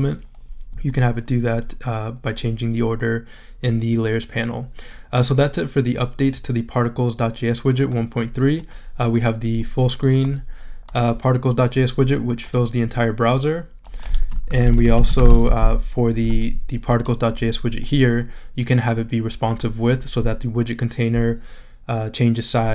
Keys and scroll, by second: 14.2-16.0 typing.